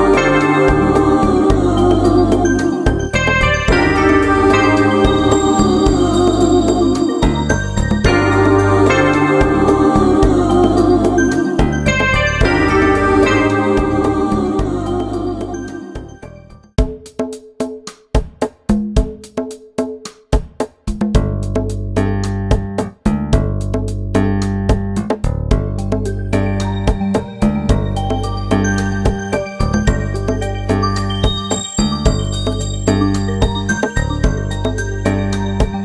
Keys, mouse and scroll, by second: 0.0 click, 1.6 middle click, 2.0 KP_1, 2.3 ctrl+Tab, 2.8 click, 3.5 middle click, 3.8 ctrl+Tab, 4.1 right click, 4.2 middle click, 4.3 click, 4.8 ctrl+z, 5.1 right click, 5.3 click, 5.3 middle click, 5.9 middle click, 6.6 middle click, 7.0 click, 8.3 click, 8.7 click, 9.1 ctrl+i, 9.7 click, 12.0 click, 12.5 click, 12.6 right click, 12.9 middle click, 13.0 a, 13.1 middle click, 13.4 right click, 13.6 click, 13.9 middle click, 14.3 click, 16.2 middle click, 17.3 c, 18.5 middle click, 18.9 right click, 19.3 middle click, 19.6 right click, 20.2 middle click, 20.9 click, 21.5 t, 21.8 click, 22.8 ctrl+Tab, 23.1 right click, 23.6 middle click, 23.8 right click, 24.3 middle click, 24.8 middle click, 25.0 ctrl+Tab, 25.4 ctrl+e, 26.0 middle click, 26.6 right click, 27.5 middle click, 27.9 right click, 28.4 ctrl+e, 28.8 ctrl+Tab, 29.1 right click, 30.0 click, 30.7 right click, 31.4 click, 32.6 ctrl+Tab, 34.4 ctrl+a, 34.8 KP_1, 34.9 shift+c, 35.7 click.